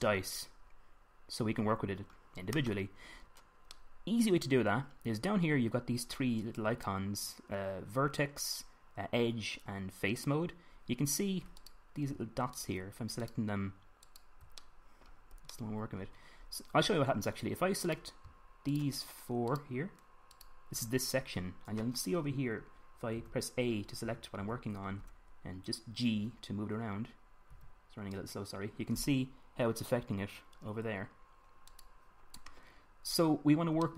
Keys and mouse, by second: 4.4-12.3 middle drag, 12.3-16.4 drag, 17.8 middle click, 23.9 a, 24.8 a, 25.1 a, 26.9 g, 28.3 g, 32.5 middle click, 33.4 click, 33.5 middle click.